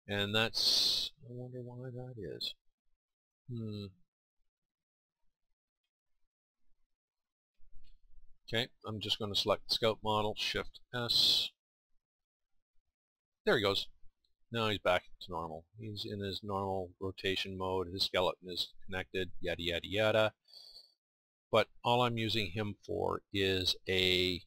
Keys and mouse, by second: 6.9-10.8 drag, 10.8 shift+s, 14.0 shift+s.